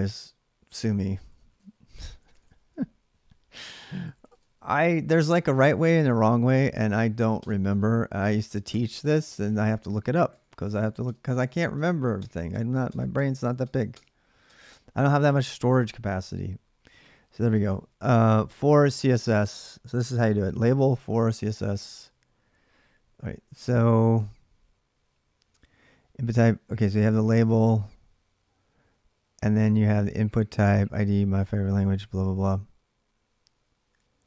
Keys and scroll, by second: 0.0-5.7 typing, 7.2-11.5 typing, 12.7-13.4 typing, 18.4 Return, 18.4 typing.